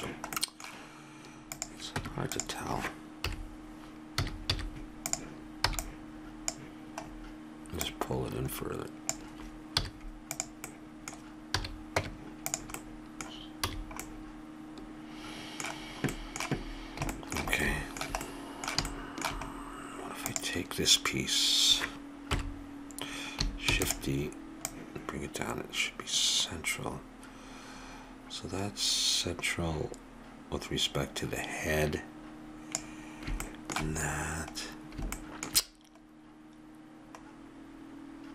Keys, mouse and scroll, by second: 0.3-1.5 middle drag, 1.5 click, 1.9 Tab, 3.2 KP_7, 4.1 a, 4.5 z, 5.7 b, 7.0 middle click, 7.8-9.6 drag, 9.8 z, 11.5 a, 12.0 Tab, 13.7 a, 15.8-20.3 middle drag, 20.3-22.0 drag, 22.3 KP_7, 23.7 shift+d, 24.7-26.5 drag, 33.4 middle click, 36.9-38.3 middle drag.